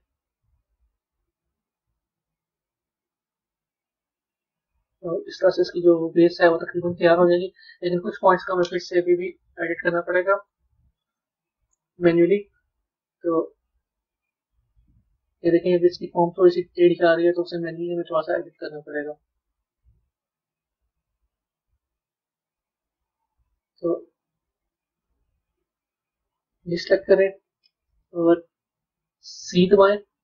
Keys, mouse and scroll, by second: 0.0 middle click, 4.3-7.3 middle drag, 10.4 Tab, 11.0 click, 13.7 click, 14.2-17.3 middle drag, 19.1 Tab, 20.1 click, 20.5 b, 21.2-24.2 middle drag, 24.2 click, 24.9-26.4 middle drag, 27.2 scroll up 1, 27.2-29.6 middle drag.